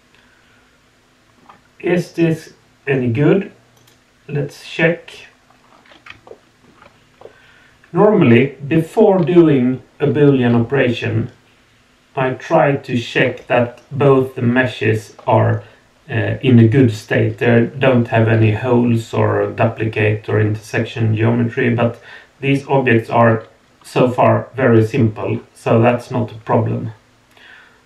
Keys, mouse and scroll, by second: 3.7 click, 5.6 scroll up 2, 6.2-6.6 shift+middle drag, 7.2-8.0 middle drag, 21.8-27.8 middle drag.